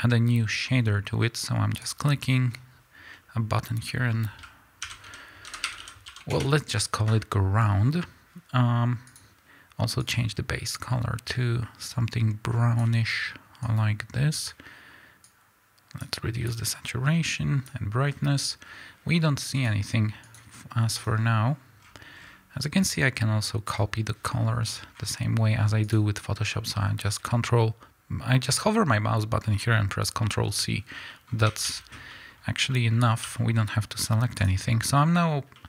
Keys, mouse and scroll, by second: 1.7-9.1 drag, 6.3 Return, 18.6 scroll down 1, 19.5 click, 21.7-22.7 scroll down 1, 22.7 click, 24.6-25.8 scroll up 1, 25.8 click, 30.8 scroll down 1, 31.0-32.3 middle drag, 31.2 scroll up 1, 31.4 a, 32.3-32.6 scroll up 1, 33.1 z, 35.5 middle click.